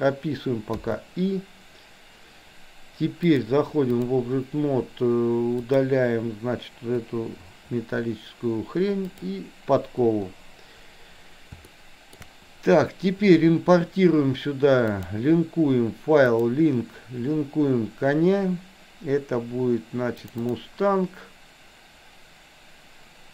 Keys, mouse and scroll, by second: 0.8 i, 3.3-4.1 drag, 5.6 click, 7.1 Delete, 9.1 click, 11.7 shift+middle click, 15.1-16.6 drag.